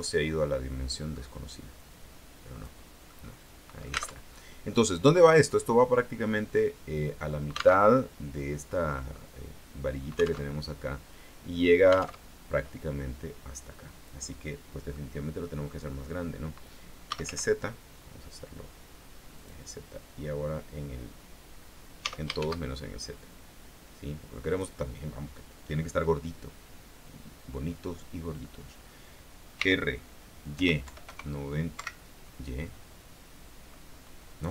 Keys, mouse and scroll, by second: 0.6 middle click, 1.9-3.0 drag, 3.3-4.4 middle drag, 4.4 alt+Tab, 8.0 alt+Tab, 9.0 scroll up 2, 10.7 alt+Tab, 12.5 alt+Tab, 15.1 middle click, 17.0-17.9 typing, 19.5 click, 22.2 s, 22.5 shift+z, 24.7 click, 29.7 r, 30.7 y, 31.0 KP_9, 31.2 KP_0, 31.9 Escape.